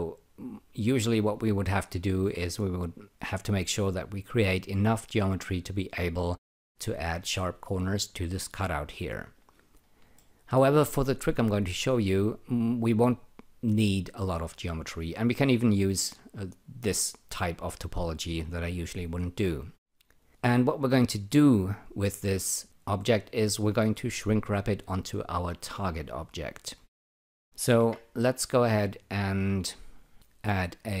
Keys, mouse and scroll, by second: 0.8 click, 10.1 alt+middle click, 22.6 click, 27.8 e, 30.1 shift+click.